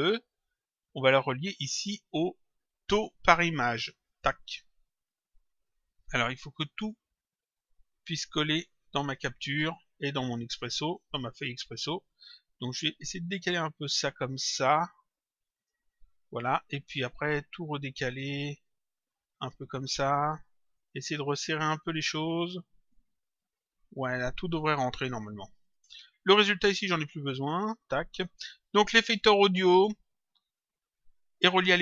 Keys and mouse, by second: 4.0 click, 6.2 click, 7.4 click, 10.2 click, 11.4 click, 13.4 click, 16.9 click, 18.7 click, 20.2 click, 22.8 click, 25.6 click, 27.5 Delete.